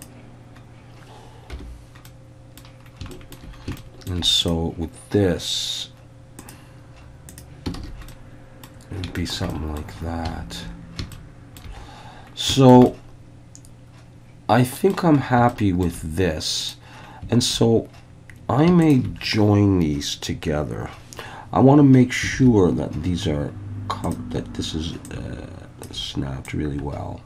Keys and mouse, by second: 0.0-0.9 drag, 2.1-2.6 middle drag, 3.1 shift+middle drag, 3.8-4.1 shift+middle drag, 4.4 click, 6.4 click, 7.3 click, 7.8 alt+a, 8.1 middle click, 9.2 shift+middle click, 9.5 middle click, 11.2-11.6 shift+middle drag, 12.6 shift+middle drag, 12.9-14.9 middle drag, 15.5-15.9 shift+middle drag, 16.6 click, 22.3 alt+a, 25.1-25.9 ctrl+drag, 26.5-27.2 drag.